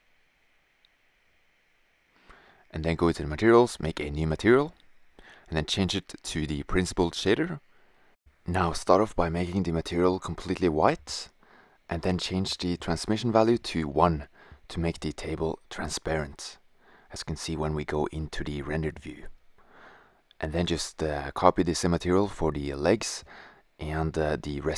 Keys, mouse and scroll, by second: 1.7-3.0 right drag, 3.0-4.2 drag, 4.5-6.4 drag, 8.8-10.1 drag, 13.3-14.6 drag, 16.2 click, 18.6 click, 18.7-19.3 middle drag, 23.7 click, 24.3 middle click.